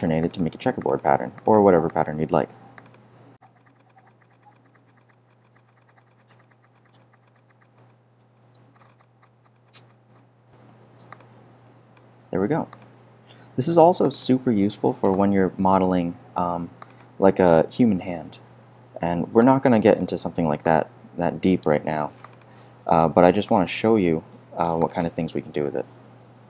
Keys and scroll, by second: 15.1 BackSpace, 18.3 r.